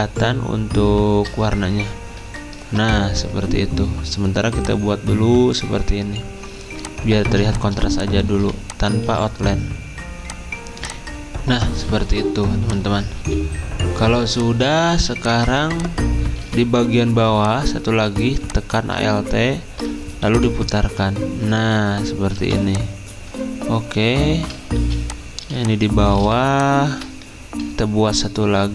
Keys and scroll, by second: 2.2 ctrl+], 7.2 z, 8.7-9.4 typing, 13.2 /, 14.9 z, 16.1-16.8 typing, 20.3 r, 22.3 v, 24.7 z, 26.2 typing.